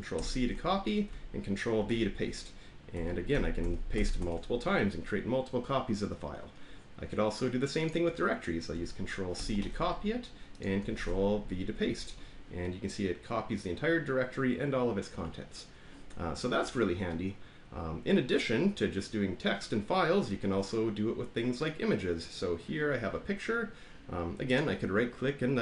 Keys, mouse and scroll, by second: 0.1 ctrl+c, 1.7 ctrl+v, 2.9 ctrl+v, 3.3 ctrl+v, 3.6 ctrl+v, 3.9 ctrl+v, 7.8 click, 9.3 ctrl+c, 10.6 click, 10.9 ctrl+v, 22.2 click, 24.5 right click.